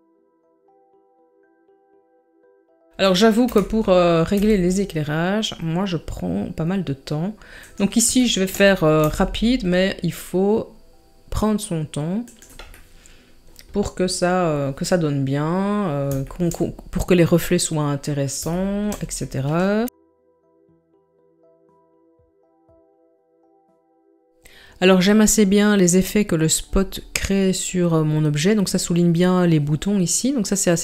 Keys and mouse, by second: 0.4-1.9 typing, 3.5 KP_7, 4.3 r, 8.3 shift+middle drag, 9.0 g, 12.9 middle click, 15.0-15.3 middle drag, 16.4 shift+middle click, 18.5-18.9 shift+middle drag, 19.8 g, 20.0 s, 20.1 click, 20.3 click, 20.7 click, 21.8 shift+middle click, 22.3 click, 22.9 click, 23.2 click.